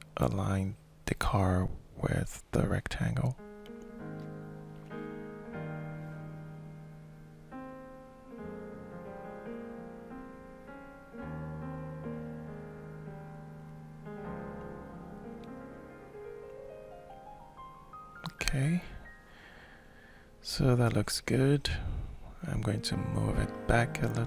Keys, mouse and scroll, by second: 1.9-2.9 shift+middle drag, 2.9-5.8 drag, 9.8-17.3 middle drag, 17.4 middle click, 18.0 alt+shift+middle click, 18.3-20.1 alt+shift+drag, 18.5-19.5 alt+shift+right drag, 20.5 alt+shift+middle click, 21.2-22.4 ctrl+shift+middle drag, 23.1-24.1 shift+drag.